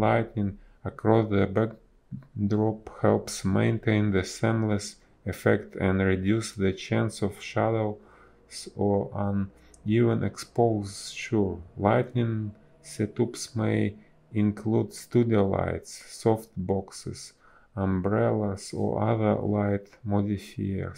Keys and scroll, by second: 1.0 ctrl+z, 1.3 ctrl+z, 1.4 space, 2.0 b, 3.9 ctrl+z, 5.5 ctrl+z, 6.8 space, 8.5 ctrl+z, 9.7 ctrl+z, 11.1 space, 11.7 ctrl+z, 11.7 space, 12.9 ctrl+z, 13.4 ctrl+z, 14.3 ctrl+z, 15.8 ctrl+z, 17.2 space, 18.9 ctrl+z, 20.5 space.